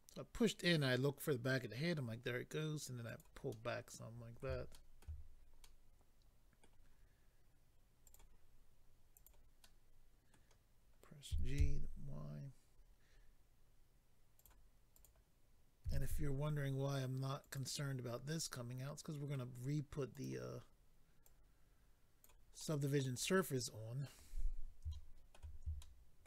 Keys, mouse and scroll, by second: 3.0 click, 3.2 click, 3.5 middle click, 4.7 shift+middle click, 5.2-6.2 scroll up 3, 5.6 middle click, 8.0 click, 8.1 click, 9.1 click, 9.3 click, 9.6 middle click, 11.3 typing, 12.7-13.5 scroll up 4, 14.4 click, 15.0 click, 15.8-16.3 typing, 17.4 click, 17.6 click, 18.5 middle click, 20.1 click, 20.2 click, 21.2 click, 22.6 middle click, 23.1-23.4 scroll down 1, 24.0 middle click, 24.0 scroll down 3, 24.9 shift+middle click, 25.3 middle click, 25.8 shift+middle click.